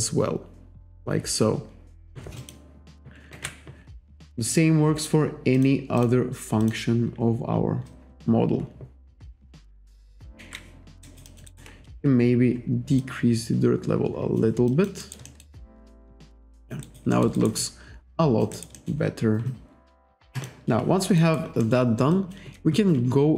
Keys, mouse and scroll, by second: 2.4 click, 3.4 ctrl+z, 4.2 click, 4.8-5.2 scroll up 1, 5.6 click, 6.0 click, 6.6 click, 7.9 click, 10.4 ctrl+z, 11.1 alt+right click, 11.3 alt+click, 11.5 alt+right click, 13.0 click, 14.7 alt+click, 15.3 alt+middle click, 15.6 alt+click, 16.9 alt+right click, 17.1 alt+middle click, 17.4 alt+right click, 17.6 alt+click, 18.8 alt+middle click, 20.4 click, 21.2 alt+right click, 21.6 alt+middle click, 22.1 alt+click.